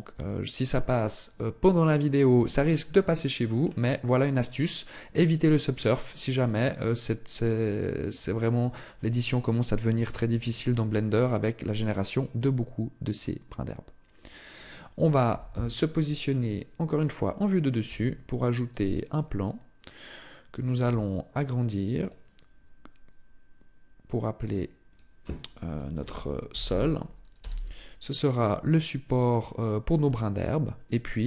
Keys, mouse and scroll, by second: 0.2-1.3 scroll down 1, 1.3 scroll down 1, 1.4 shift+middle click, 2.1 middle click, 3.0-3.6 scroll down 3, 4.8 right click, 5.2 right click, 5.9 right click, 7.4 shift+middle click, 8.0 scroll down 1, 8.6-9.0 scroll down 2, 10.9 shift+middle click, 15.0 KP_7, 16.1 shift+middle click, 17.5 shift+a, 20.4 s, 21.7 click, 24.1 click, 24.6 click, 28.9-29.5 scroll down 2, 29.5-30.6 scroll down 4, 31.0 scroll up 2.